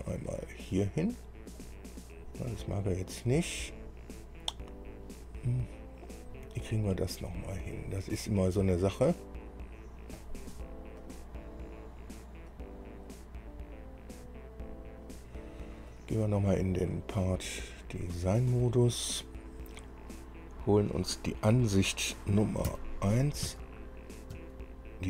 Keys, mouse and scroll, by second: 0.5 click, 1.8 click, 10.4 click, 11.2 click, 12.7 click, 13.4 click, 14.3 click, 16.1 click, 18.0 click, 22.9 KP_1, 23.6 KP_2, 24.5 KP_1.